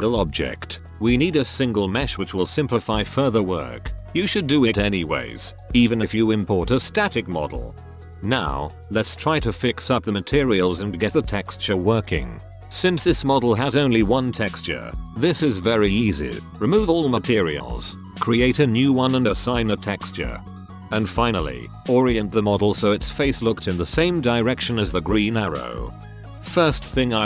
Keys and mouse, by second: 2.7-4.4 drag, 2.7 a, 2.8 a, 4.4 ctrl+j, 7.6-9.8 drag, 9.8 ctrl+c, 11.1 ctrl+v, 12.8 middle drag, 12.9 ctrl+KP_1, 14.6 click, 15.3 click, 16.0 ctrl+KP_1, 16.4-19.1 typing, 19.6-20.7 right drag, 20.7 ctrl+KP_1, 23.2 right click, 23.2 drag, 23.3 r, 24.4 middle click, 24.4 KP_1, 24.8 right click, 24.8 g, 25.4 right click, 25.4 r, 25.9 ctrl+KP_1.